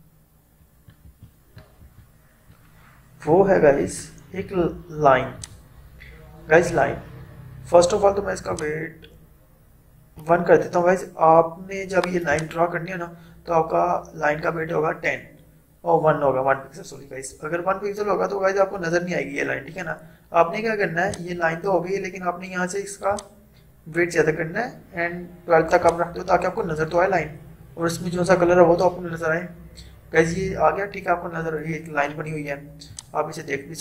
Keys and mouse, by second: 3.9 right click, 5.5 click, 8.5-16.0 drag, 21.1-30.0 drag, 32.9-33.8 drag.